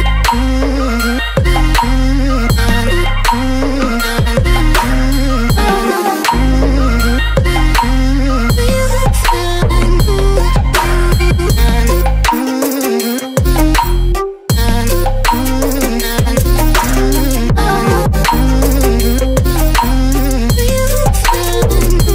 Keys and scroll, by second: 0.0 space, 1.3 ctrl+v, 6.3 Return.